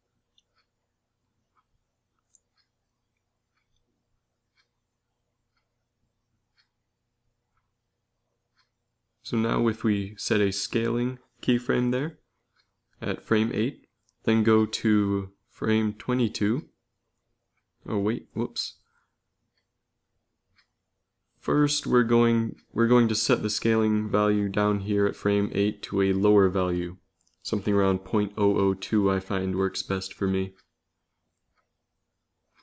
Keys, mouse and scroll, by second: 9.6 i, 13.9 Right, 14.5 Right, 14.8-15.3 Right, 15.4 Right, 15.7 Right, 22.6-27.6 drag, 29.8 0, 31.4 ctrl+c, 31.9 ctrl+v, 32.4 ctrl+v.